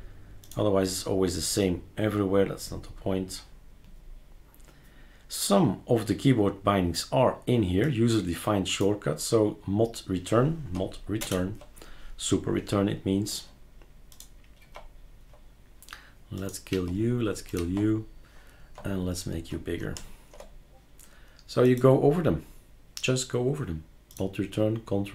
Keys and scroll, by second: 11.2 super+Return, 14.6 super+q, 16.7 super+q, 17.6 super+q.